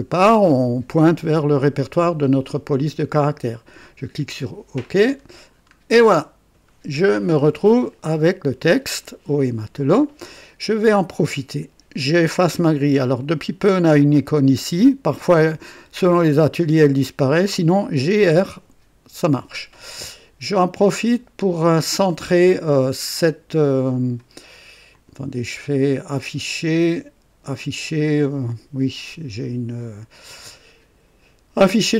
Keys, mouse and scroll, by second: 3.8 click, 4.9-5.8 scroll down 1, 6.0 right click, 17.8-18.7 typing, 24.9 click.